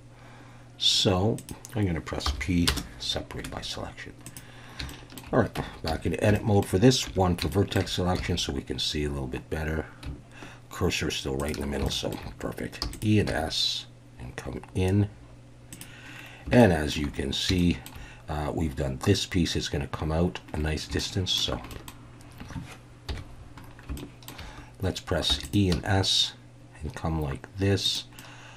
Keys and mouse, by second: 1.4 click, 2.2 p, 3.4 Tab, 4.9 shift+middle drag, 5.5 Tab, 5.9 a, 6.3 shift+middle click, 7.1 1, 7.5 shift+middle click, 8.2 s, 11.4 shift+click, 11.9 shift+click, 12.8 e, 12.9 click, 12.9 w, 13.3 s, 15.7 click, 16.6 shift+middle click, 17.6 shift+middle click, 21.0 shift+middle click, 21.7 middle click, 23.1 KP_1, 24.0-24.3 shift+middle drag, 25.3 e, 25.4 click, 25.7 s, 27.8 click, 28.2-28.5 middle drag.